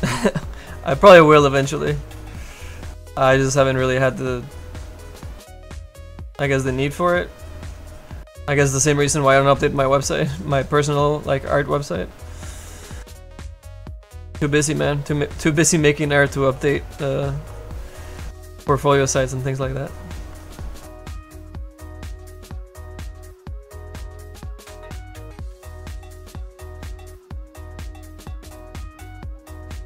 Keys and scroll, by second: 3.0 s, 13.2 s, 14.1 s.